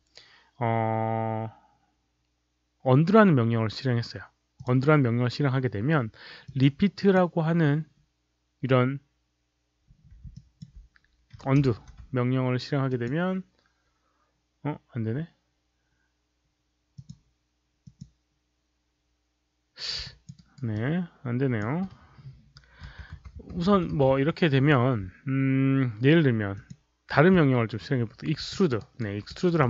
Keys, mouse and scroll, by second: 4.5 click, 6.4 click, 6.9 click, 10.2 alt+click, 11.5 ctrl+z, 12.8 click, 16.8 click, 17.8 click, 19.9 alt+click, 20.3 alt+right click, 20.6 alt+click, 22.8 ctrl+y, 23.1 ctrl+y, 23.9 ctrl+y, 26.4 click, 28.4 alt+click, 28.7 alt+right click, 29.2 alt+right click, 29.5 alt+middle click.